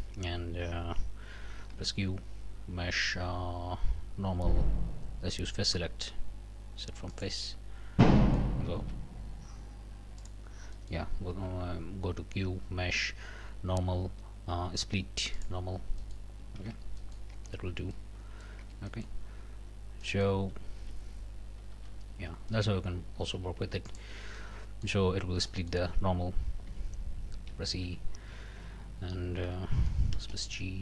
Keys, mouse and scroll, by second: 0.0 scroll up 2, 1.7 q, 7.1 click, 7.6 scroll down 2, 8.0 click, 8.7 ctrl+z, 10.2 click, 10.8 click, 11.3 q, 15.3 click, 16.0 click, 16.6 alt+a, 17.0 alt+click, 17.3 alt+Tab, 17.6 alt+scroll down 1, 17.9 alt+click, 18.1 middle click, 18.6 Tab, 18.9 middle click, 19.2 scroll up 1, 20.0 middle click, 20.7 ctrl+z, 21.7 ctrl+z, 22.5 ctrl+middle click, 23.1 a, 23.9 alt+click, 24.4 alt+click, 25.5 click, 26.7 e, 27.7 Escape, 30.1 space, 30.2 g.